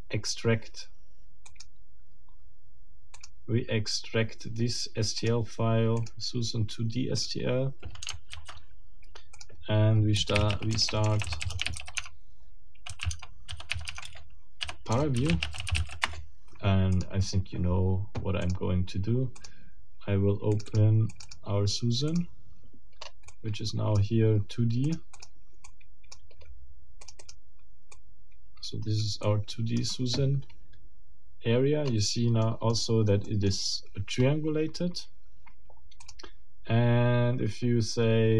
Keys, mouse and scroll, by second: 1.5 click, 3.1 click, 5.2 click, 6.0 click, 7.2 click, 8.3 ctrl+alt+t, 9.4 ctrl+alt+click, 10.1 ctrl+alt+p, 10.3 ctrl+alt+a, 10.4 ctrl+alt+r, 10.5 ctrl+alt+a, 10.7 ctrl+alt+BackSpace, 11.3 ctrl+alt+c, 11.4 d, 11.5 space, 11.8 ctrl+alt+shift+e, 12.0 ctrl+alt+shift+Tab, 12.9 ctrl+alt+shift+m, 13.0-15.8 typing, 13.1 Tab, 13.9 Tab, 14.0 Return, 16.0 Return, 17.0 click, 18.5 middle click, 19.4 middle click, 20.5 middle click, 21.1 middle click, 22.1 middle click, 23.0 scroll up 2, 23.3 middle click, 24.8 middle click, 25.6 middle click, 27.0 click, 27.9-29.2 drag, 31.4 scroll down 2, 31.8 scroll up 2, 32.4 middle click, 33.2 middle click, 36.0 click.